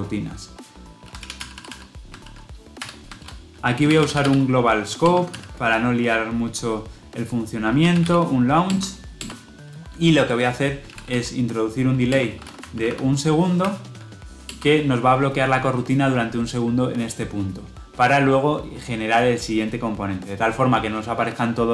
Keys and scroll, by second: 5.0 Return, 8.8 Return.